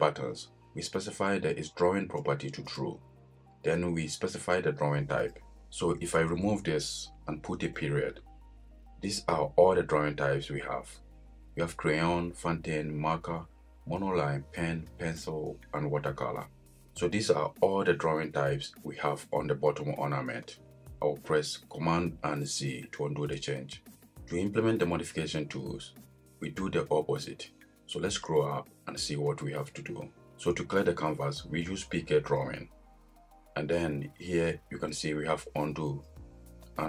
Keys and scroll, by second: 22.4 super+z.